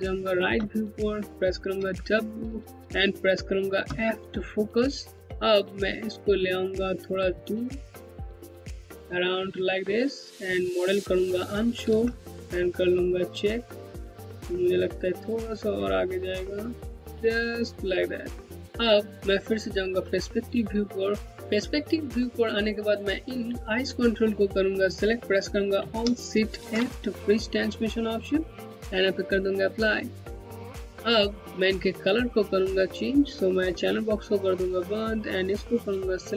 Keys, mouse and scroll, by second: 1.4 w, 3.4 f, 5.2-6.1 scroll down 1, 7.9 click, 11.4 2, 12.7 scroll down 1, 15.1 click, 19.2 space, 19.9 scroll down 1, 20.3 alt+click, 20.5 Home, 22.3 click, 22.6 Home, 26.2 alt+shift+f, 27.9 click, 28.1 Home, 33.7 click, 35.3 Home.